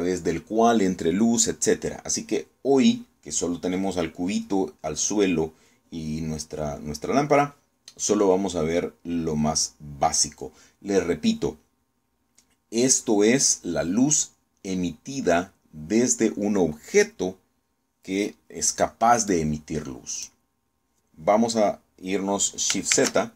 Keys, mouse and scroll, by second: 20.0 click.